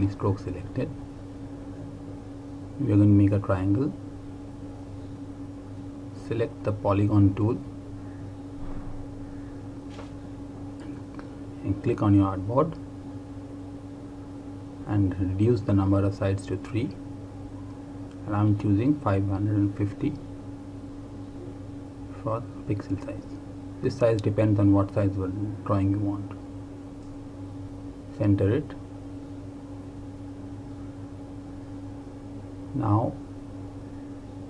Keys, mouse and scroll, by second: 3.9 click, 11.6 click, 16.2-19.0 scroll down 1, 19.2 click, 21.8 KP_5, 24.1 click, 26.6 click, 29.6 click.